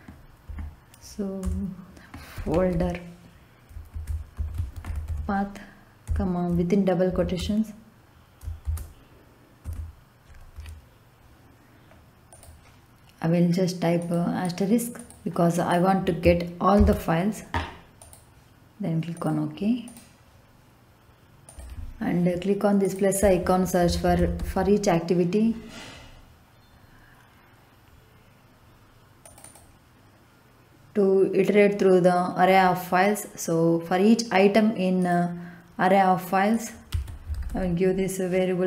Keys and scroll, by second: 0.0-6.0 typing, 7.0 shift+', 8.6 shift+', 9.6 Left, 16.7 shift+8, 23.6-24.8 typing, 36.9 a, 37.3 r.